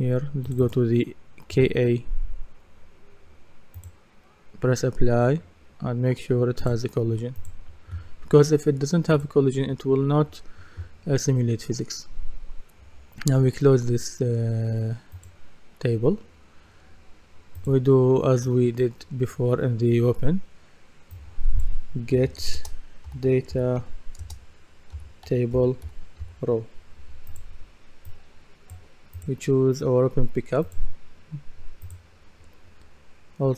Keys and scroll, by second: 21.9-26.7 typing.